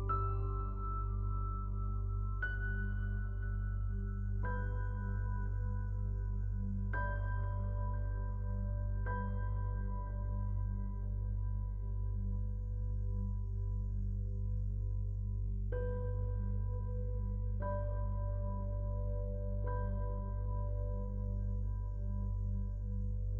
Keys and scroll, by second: 18.8 ctrl+Return, 23.2 ctrl+d.